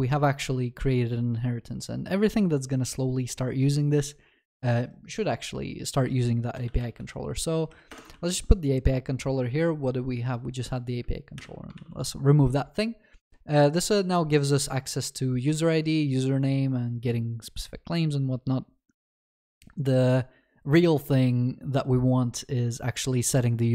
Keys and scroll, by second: 8.0 Return, 8.2 ctrl+s, 11.3 ctrl+s, 11.8 ctrl+s.